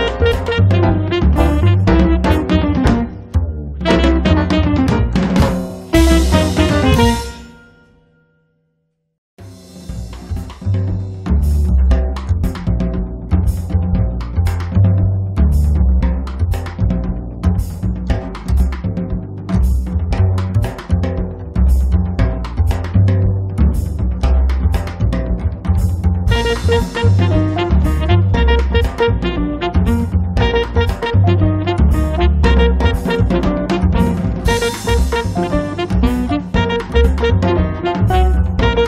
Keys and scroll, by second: 1.2 m, 2.7 Up, 5.1 space.